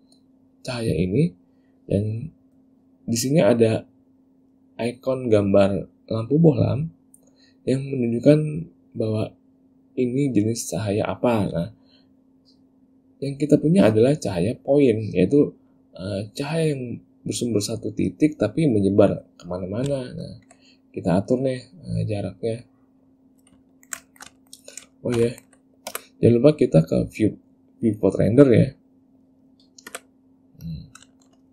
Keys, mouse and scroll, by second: 20.2 ctrl+middle click, 21.4 click, 22.8 click, 23.8 ctrl+middle click, 24.2 shift+middle click, 24.5 ctrl+middle click, 25.1 shift+middle click, 25.4 ctrl+middle click, 26.0 z, 30.0 z, 31.3 shift+middle click.